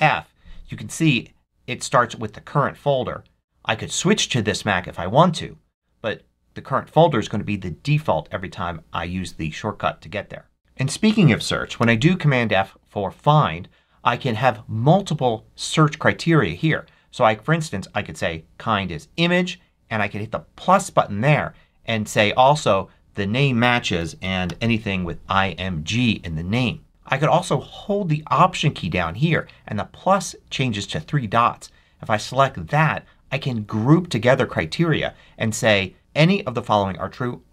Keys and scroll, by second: 11.7 super+f, 23.7-24.9 typing.